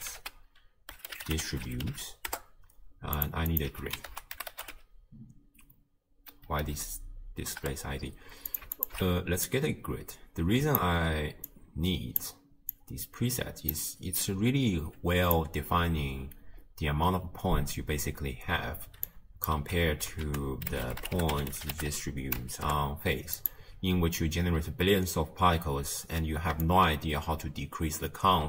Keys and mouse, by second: 3.5 click, 3.7 x, 4.1 ctrl+a, 8.8 alt+shift+click, 9.5-10.8 drag, 11.5 click, 12.7-13.7 drag, 14.2-15.4 drag, 19.2 click, 19.6 m, 20.3 ctrl+a, 26.7-28.4 shift+drag.